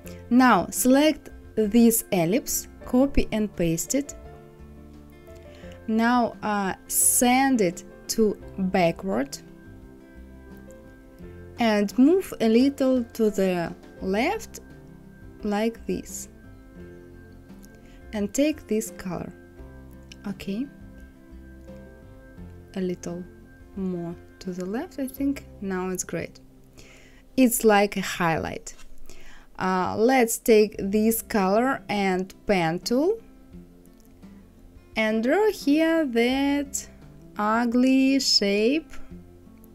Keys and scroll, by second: 5.1 ctrl+c, 6.0 ctrl+f, 13.1 Left, 14.0 Up, 14.5 Left, 21.9 Left, 22.3 Up, 22.8 Right.